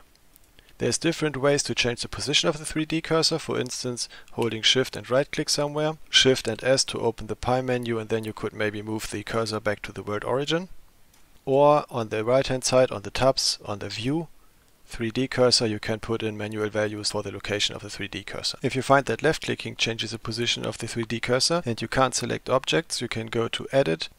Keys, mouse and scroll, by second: 0.4 shift+click, 0.4 shift+right click, 4.9 shift+click, 4.9 shift+right click, 5.3 shift+click, 5.8 shift+right click, 6.4 shift+s, 13.9 click, 15.7-18.6 drag, 23.7 click.